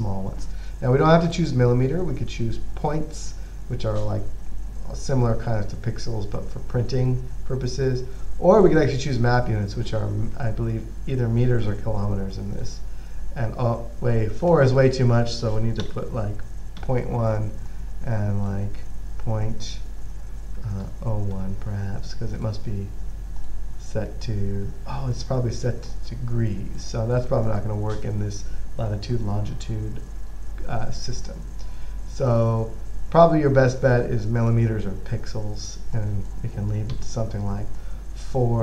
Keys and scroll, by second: 16.1-17.5 typing, 21.1-21.7 typing, 37.2 typing.